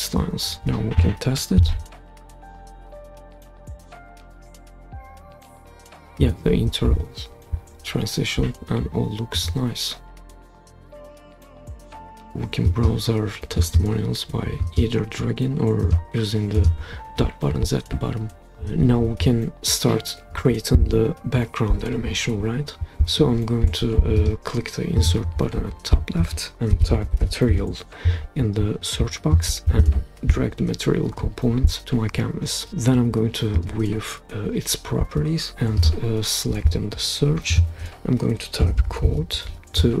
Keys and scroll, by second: 1.6 super+p, 26.5-27.6 typing, 28.8-29.6 typing, 38.3-40.0 typing.